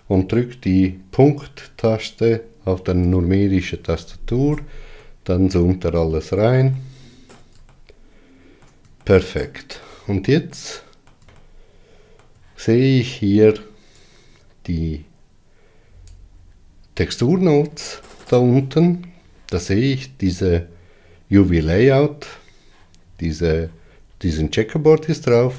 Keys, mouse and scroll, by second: 3.9 KP_Decimal, 5.9-25.5 middle drag.